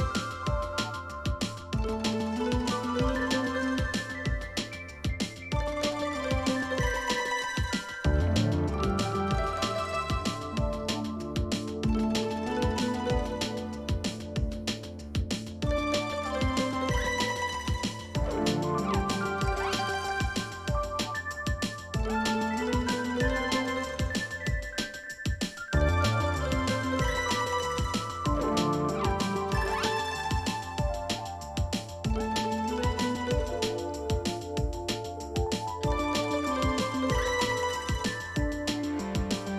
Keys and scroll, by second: 5.7-6.7 typing, 10.5 shift+Left, 10.7 shift+Left, 10.8-11.2 shift+Left, 11.7 shift+Up, 12.0 shift+Up, 13.0 shift+Left, 13.3 shift+Up, 13.6 shift+Right, 17.8 ctrl+c, 20.3 ctrl+v, 24.3-25.4 typing, 27.2 shift+Right, 27.4 shift+Right, 27.5-29.4 shift+Right, 29.5 Left, 29.8 Left, 30.5 Left, 32.9 shift+Down, 33.1 shift+Down, 33.3 shift+Down, 36.2 shift+Down, 36.4 shift+Down, 36.6 shift+Down.